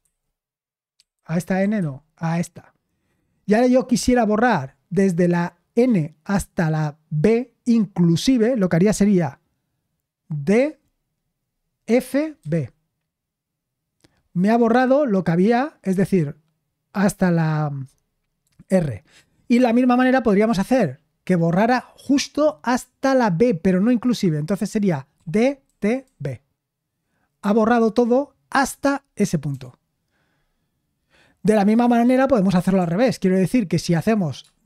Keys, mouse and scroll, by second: 0.0-2.2 typing, 10.5 typing, 11.9-12.4 typing, 18.4 typing, 24.9-26.5 typing, 29.5 u, 32.7 super+l.